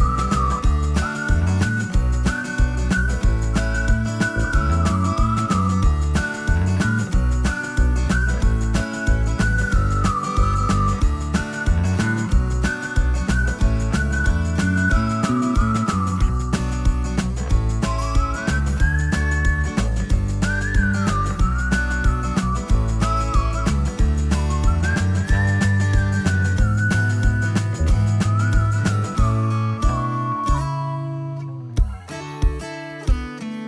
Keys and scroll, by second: 2.4-7.4 typing, 5.9 Escape, 22.0 ctrl+s, 29.3-32.1 typing, 33.1 typing.